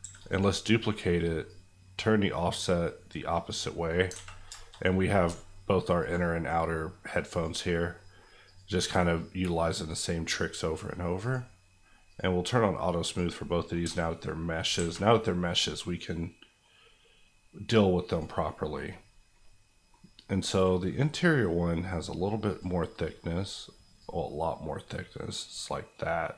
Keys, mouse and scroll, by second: 0.0 shift+d, 0.3 right click, 1.4 click, 3.9 middle click, 4.1 alt+a, 4.6 shift+middle click, 6.0 click, 7.9 middle click, 8.4 click, 8.8 middle click, 9.7 click, 13.4 middle click, 13.8 alt+a, 14.1 middle click, 14.7 alt+a, 15.6 middle click, 18.1 click, 18.4-19.9 middle drag, 20.4 q, 22.4 click.